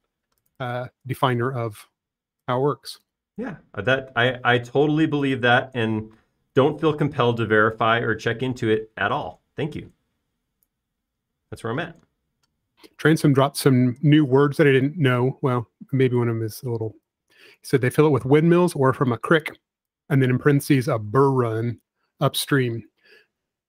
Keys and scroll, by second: 1.4 space, 5.9 r, 6.5 r, 9.6 p, 16.8 space, 18.1 p, 20.4-20.8 typing.